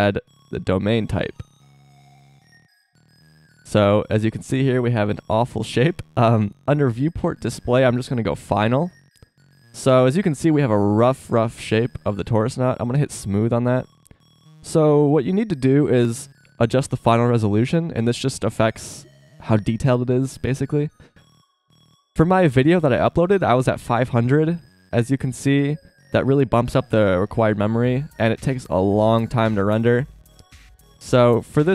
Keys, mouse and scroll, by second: 3.2 middle click, 7.8-9.6 drag, 13.3 click, 13.8 middle click, 14.2-18.4 middle drag, 24.9 KP_0.